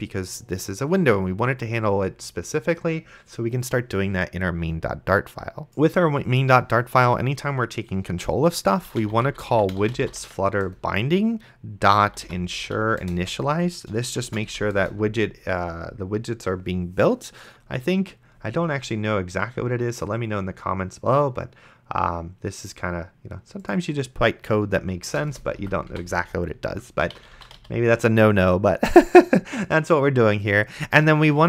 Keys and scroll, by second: 7.3 Return, 8.8-10.6 typing, 10.6 Return, 11.7-15.0 typing, 25.3 Return, 25.6 Up, 25.9 Tab, 26.8-28.1 typing.